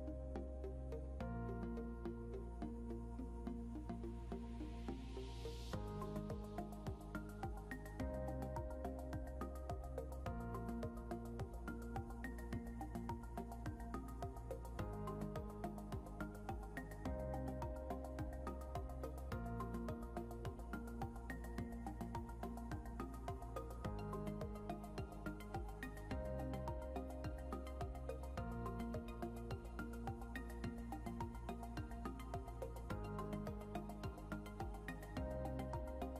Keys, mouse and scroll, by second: 0.5 scroll up 1, 2.8 scroll down 1, 3.3 scroll up 1, 6.7 scroll down 1, 17.9 scroll down 1, 19.7 scroll down 1, 20.5 scroll down 1, 22.0 scroll down 1, 30.1 scroll up 1, 33.5 double click, 35.4-36.1 typing.